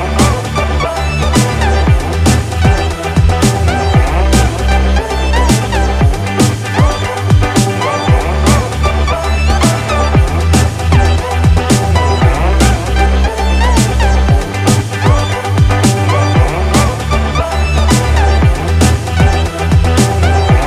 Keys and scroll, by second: 3.1 ctrl+z, 10.2 ctrl+z, 10.8 ctrl+alt+z, 12.1 ctrl++, 12.6 ctrl+=, 18.1 ctrl+z.